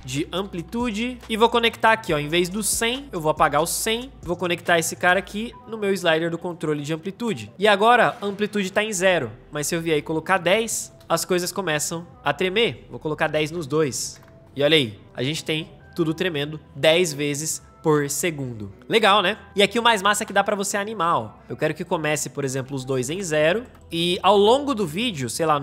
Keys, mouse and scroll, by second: 0.0-2.1 typing, 3.8 Return, 10.9 space, 15.0 space, 23.6-25.6 drag.